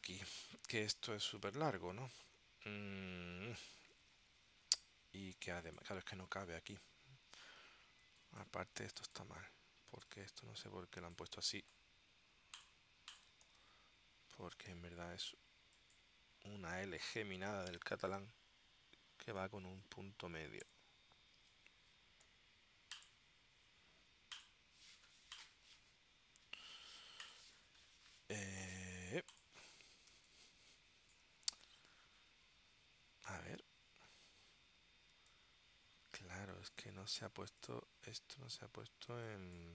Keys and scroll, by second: 8.2 space, 11.6 super+c, 17.5 super+v, 19.0 Left, 20.7 BackSpace, 21.5 shift+3, 30.3 space, 33.5 super+Tab, 35.2 space, 39.2 space.